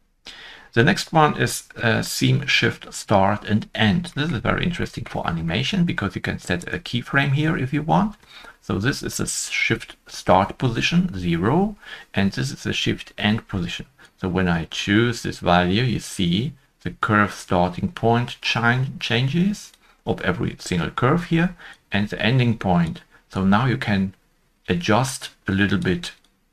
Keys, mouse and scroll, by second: 3.7 0, 3.8 Return, 3.8 scroll down 1, 4.4-4.7 scroll down 1, 5.2 shift+middle click, 6.6 right click.